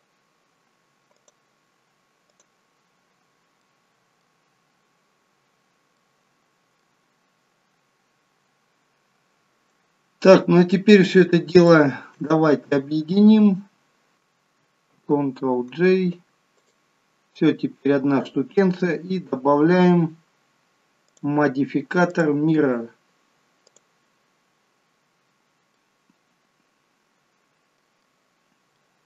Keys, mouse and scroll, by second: 3.5 middle click, 5.9 middle click, 11.5 shift+click, 15.0 ctrl+j, 16.6 click, 17.6 scroll down 2, 21.1 click, 22.1 click, 24.7-25.1 scroll up 2, 25.8 middle click, 28.5 scroll up 1, 28.8 middle click.